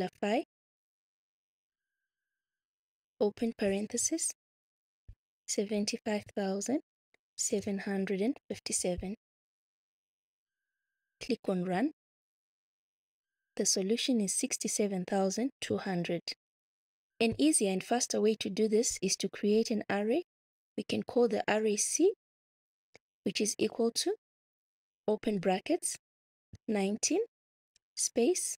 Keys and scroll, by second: 0.8 l, 5.7 7, 6.0 5, 7.5 7, 8.3 5, 8.5 7, 18.7 Return, 21.5 c, 22.7 =, 25.0 [, 26.6 1, 27.7 space.